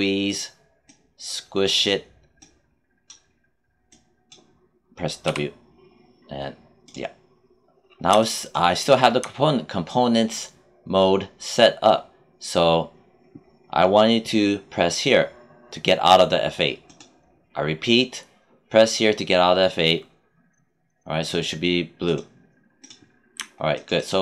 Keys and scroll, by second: 5.2 w.